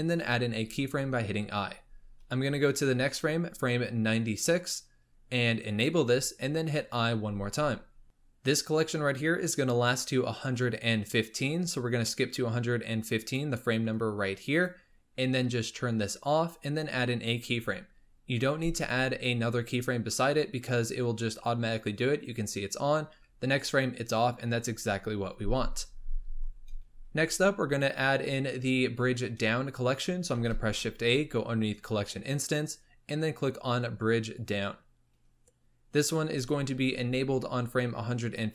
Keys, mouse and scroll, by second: 0.2 i, 2.9 Right, 5.6 click, 6.8 i, 8.0 click, 11.0-16.5 drag, 20.6 Left, 23.1 Right, 30.3 shift+a.